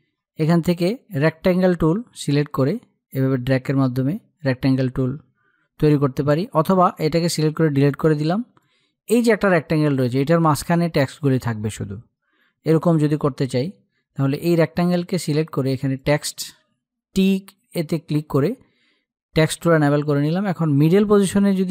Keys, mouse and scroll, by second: 0.5-5.2 drag, 5.5 click, 6.7 Delete, 8.0-11.0 drag, 15.4 click, 21.5 click.